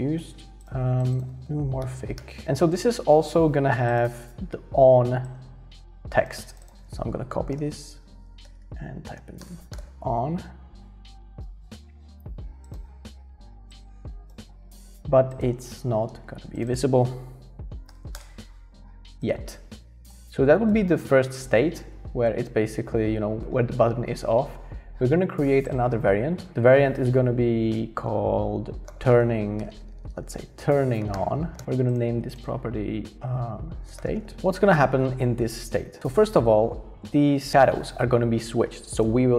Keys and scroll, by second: 7.3-10.3 typing, 10.4 Escape, 10.6 Escape, 17.9 0, 18.1 Return, 28.6-32.5 typing, 33.6-34.7 typing.